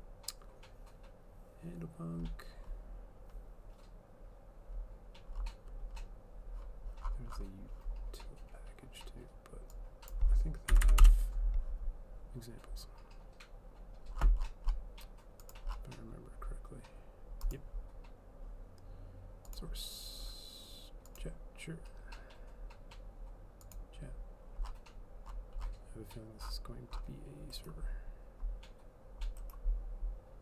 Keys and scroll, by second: 10.8 Delete, 10.9 Delete, 11.1 Return.